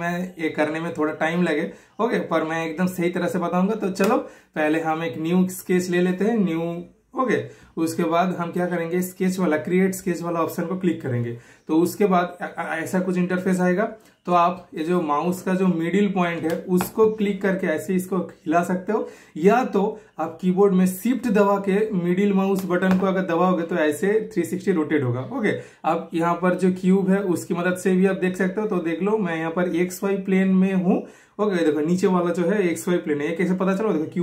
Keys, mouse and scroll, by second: 0.7 shift+super+middle click, 4.1 super+click, 4.1 typing, 11.6 super+click, 13.8 typing, 16.8 super+click, 16.8 typing, 16.9-21.1 super+middle drag, 21.1-26.5 shift+super+middle drag, 30.3-34.2 shift+super+middle drag.